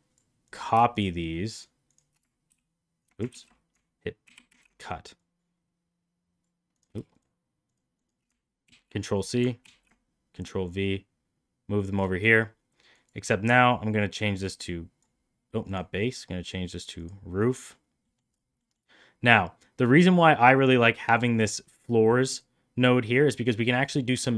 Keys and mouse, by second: 0.9 shift+click, 1.5 shift+click, 1.8 shift+click, 2.4 ctrl+x, 3.3 ctrl+z, 4.2 ctrl+c, 4.4 ctrl+v, 5.2-6.4 drag, 7.0 shift+click, 7.6 shift+click, 7.9 shift+click, 8.6 ctrl+c, 9.6 ctrl+v, 10.3-11.9 drag, 12.9-14.9 drag, 15.8-17.2 drag, 17.6 middle click, 18.1 middle click, 18.7 middle click, 21.1-22.4 drag.